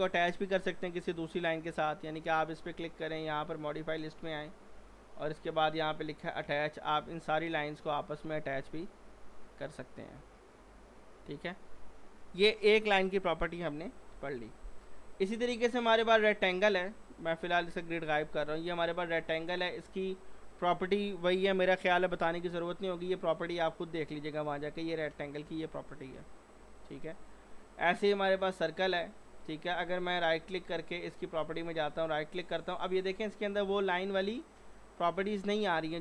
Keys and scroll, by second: 14.1 Delete, 17.3 g.